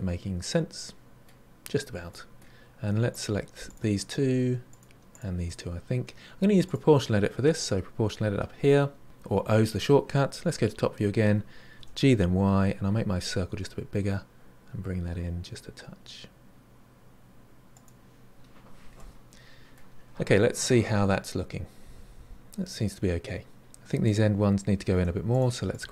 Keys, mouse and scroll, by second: 1.5-1.9 scroll up 4, 2.1-3.1 middle drag, 3.1 click, 3.6 shift+click, 4.6 shift+click, 5.1 shift+click, 6.6 click, 10.6 KP_7, 11.7 g, 18.9-19.9 middle drag, 19.9-20.3 scroll down 2, 20.3-23.3 middle drag, 24.0 click, 25.2 click, 25.7 click.